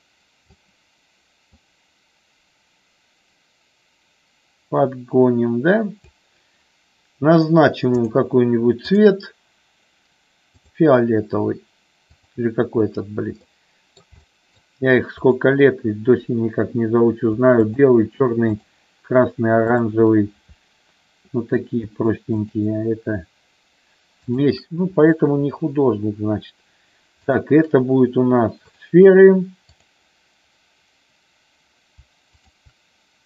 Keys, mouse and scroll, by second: 1.5-6.0 drag, 8.2 click, 8.9-10.8 drag, 12.3 click, 13.5 middle click, 14.4 shift+middle click, 15.2-16.8 drag, 22.4 shift+click, 24.2-25.7 shift+drag, 27.3-28.9 drag, 29.9 click.